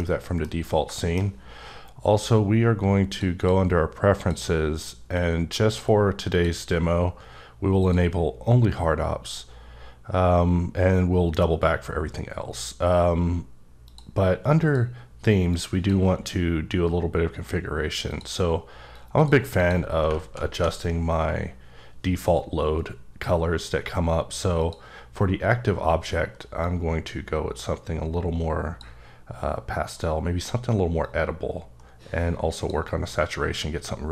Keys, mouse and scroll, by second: 0.0 middle click, 0.5 scroll up 2, 0.9 shift+middle click, 2.1 click, 3.1 click, 3.4 double click, 4.1 click, 5.4-6.1 drag, 7.8 click, 13.8 click, 14.6 click, 15.5 click, 18.1 click, 18.9 click, 19.6 click, 24.6 click, 26.6 click, 31.0 click.